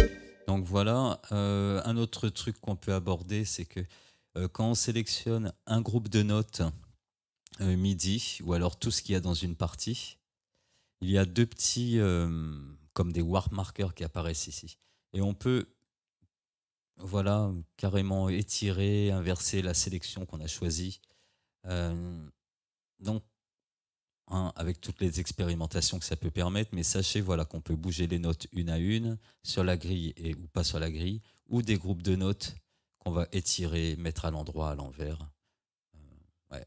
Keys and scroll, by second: 0.1 space, 24.9 ctrl+z.